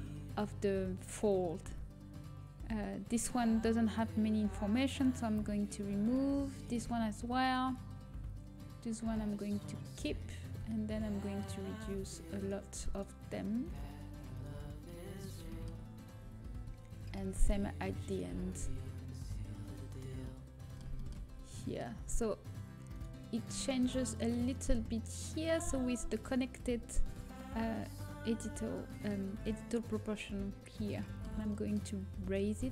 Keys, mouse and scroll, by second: 3.7-5.5 right drag, 6.4-8.4 right drag, 10.6-11.6 middle drag, 14.5 middle click, 19.2 Delete, 21.2 a, 22.8-26.1 middle drag, 26.6 g, 30.9-32.2 middle drag, 32.2 g.